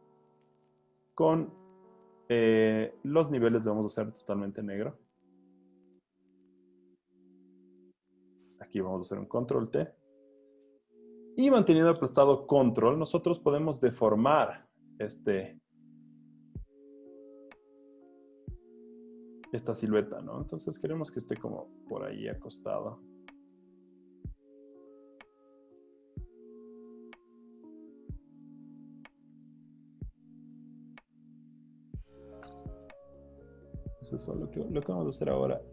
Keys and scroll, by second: 8.9 super+t, 11.0 super+z, 18.2 super+z, 32.6 Return, 34.1 l.